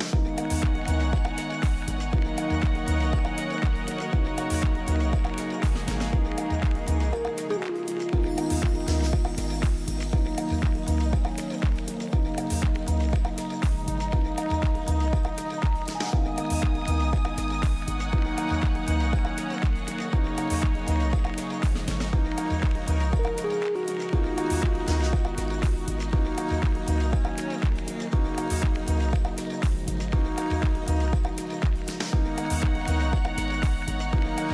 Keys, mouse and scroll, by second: 9.8 ctrl+KP_1, 12.7 KP_1, 16.9-18.9 drag, 23.6-25.5 drag, 29.5 ctrl+KP_1, 32.7-34.5 drag.